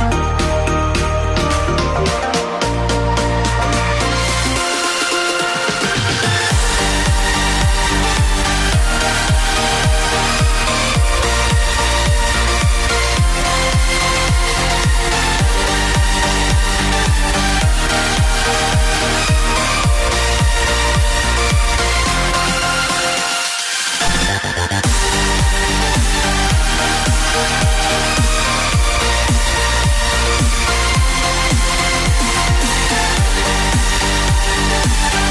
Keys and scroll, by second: 2.1 F5, 18.0-20.7 typing, 22.0 2, 23.5-24.9 typing, 30.2 ctrl+c.